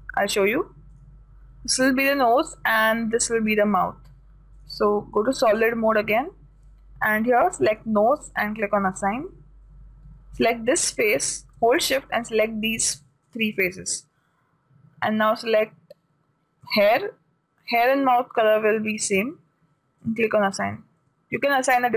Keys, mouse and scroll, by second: 0.8-2.7 drag, 5.1-6.9 drag, 8.1-10.7 drag, 9.6 a, 10.9 right click, 17.2-19.1 drag, 20.5-21.9 drag, 21.4 a.